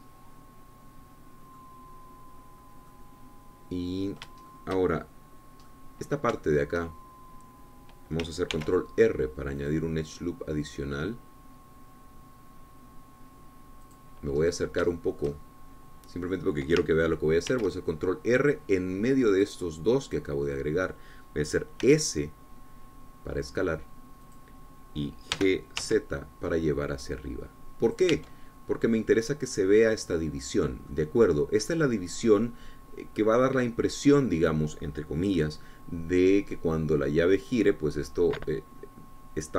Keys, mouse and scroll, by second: 3.6 scroll up 2, 4.1-5.6 middle drag, 5.7 shift+middle click, 6.9 middle click, 7.6 shift+middle click, 9.8 ctrl+r, 10.8 click, 15.1 click, 16.1-17.7 shift+drag, 18.7 ctrl+r, 20.6 click, 21.3-23.0 drag, 23.0 s, 25.5 click, 26.6 g, 27.0 z, 29.1 click, 29.4 Tab, 29.8 scroll down 1, 30.1-32.0 drag, 31.8 scroll down 1, 32.1-36.9 drag, 37.8 click.